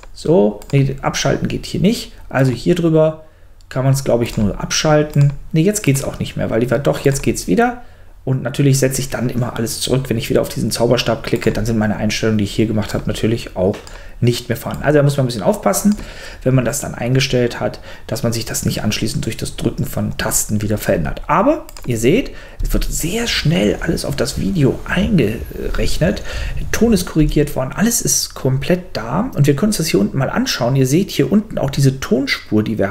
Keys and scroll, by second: 22.6 space, 27.2 space.